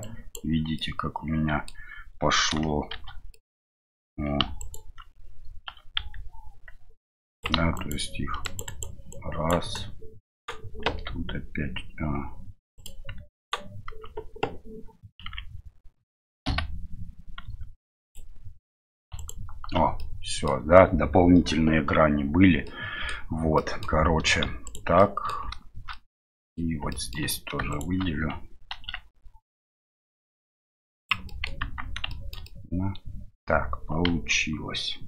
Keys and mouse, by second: 0.8 middle click, 2.9 shift+h, 3.3 middle click, 4.6 right click, 5.9 s, 7.7 right click, 8.4 right click, 8.6 right click, 9.1 alt+right click, 9.7-10.8 alt+right drag, 10.8 s, 15.2 z, 20.0 middle click, 22.6 middle click, 23.5 middle click, 25.0 middle click, 25.9 middle click, 26.9 shift+middle click, 27.7 alt+shift+right click, 28.7 ctrl+b, 31.4 middle click, 31.6 Tab, 32.1 shift+middle drag, 32.4-33.4 middle drag, 34.1 KP_1.